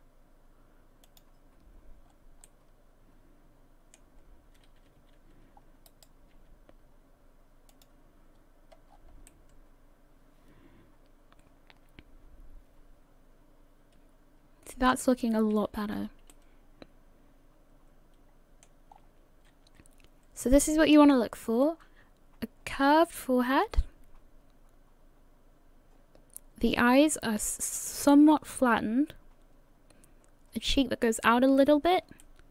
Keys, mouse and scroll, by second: 1.5-2.0 scroll up 2, 2.0 scroll down 2, 2.5 middle click, 4.2 scroll up 1, 4.8 a, 5.1 a, 5.6 a, 6.3 e, 8.3-9.3 scroll down 5, 9.3 middle click, 15.7 a, 15.9 a, 16.3 middle click, 18.9-19.3 scroll up 3, 26.5-29.7 scroll up 2, 32.2 shift+middle click.